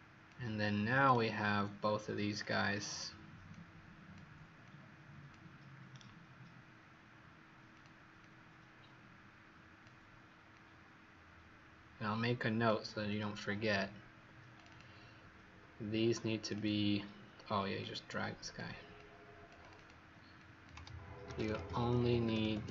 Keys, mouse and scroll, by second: 2.0 a, 2.4 click, 8.2 click, 10.5 click, 14.6 click, 16.4 click, 16.5 click, 17.7 click, 19.5 click, 19.7 click, 20.3 click, 21.0-22.7 typing.